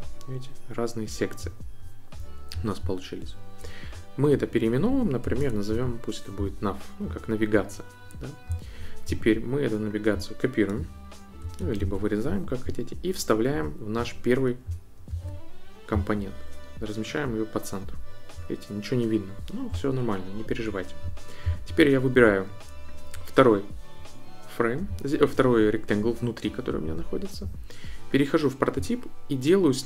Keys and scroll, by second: 5.0-6.2 typing, 11.8 super+x, 15.1 super+v.